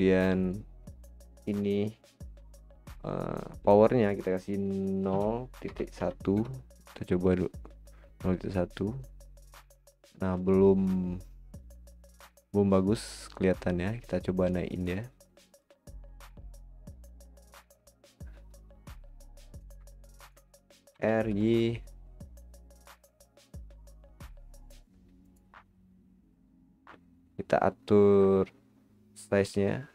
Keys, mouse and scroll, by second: 0.3-3.4 drag, 11.1 scroll down 2, 12.7 scroll down 1, 14.0 click, 15.2-16.6 drag, 16.6 click, 16.9 click, 17.1 click, 19.6 drag, 19.9-20.9 middle drag, 20.9 r, 29.2-29.9 drag.